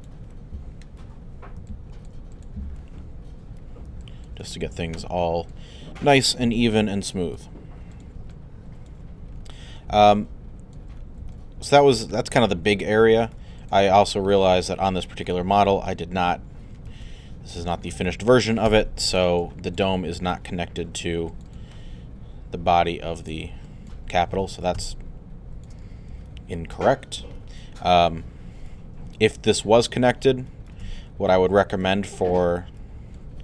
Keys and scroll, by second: 6.4 alt+w, 25.8 alt+z.